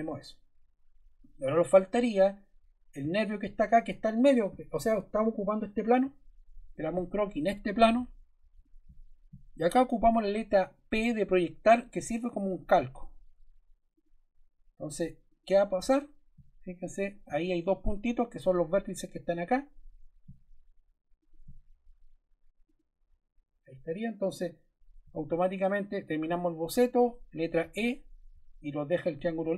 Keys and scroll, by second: 11.0 p, 27.5 e.